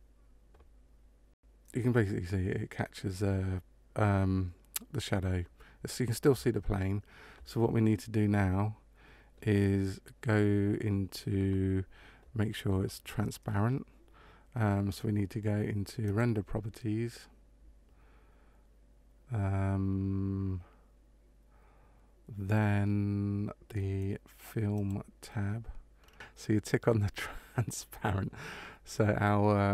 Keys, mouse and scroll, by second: 16.0 click, 24.7 click, 25.9 scroll down 3, 26.1 click.